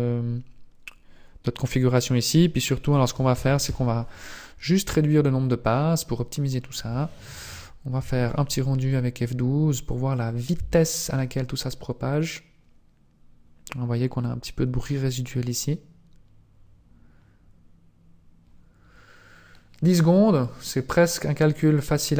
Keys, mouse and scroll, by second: 2.3 click, 3.4 KP_0.